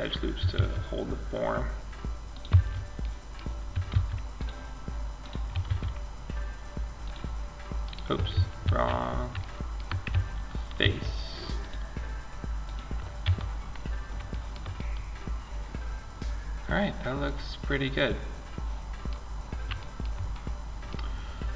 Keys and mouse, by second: 0.0 ctrl+r, 3.1 ctrl+r, 5.0 ctrl+r, 7.8 ctrl+z, 10.0 ctrl+r, 12.4 Tab, 18.5-21.5 middle drag.